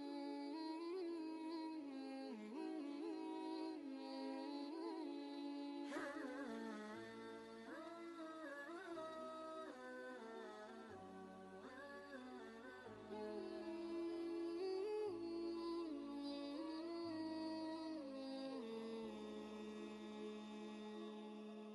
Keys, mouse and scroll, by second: 5.5 click, 5.7 ctrl+space, 6.0 ctrl+click, 6.2 ctrl+space, 8.3-11.4 drag, 11.4 ctrl+space, 11.6-13.5 ctrl+drag, 17.8 typing, 17.8 ctrl+space, 19.4 space, 20.6 alt+Tab.